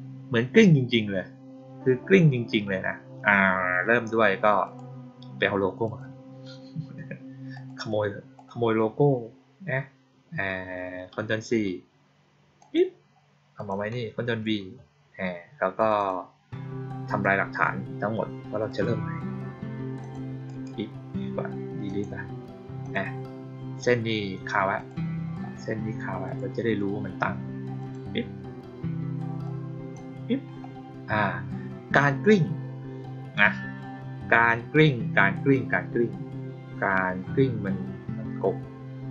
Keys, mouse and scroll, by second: 4.6 click, 5.8 click, 7.5 click, 7.7 click, 8.3 click, 12.5 click, 13.5 click, 15.7 click, 15.9 click, 17.1 click, 18.6 click, 19.9 ctrl+click, 20.4 right click, 21.8 click, 22.7 click, 24.7 click, 26.2 click, 27.7 click, 29.4-29.9 drag.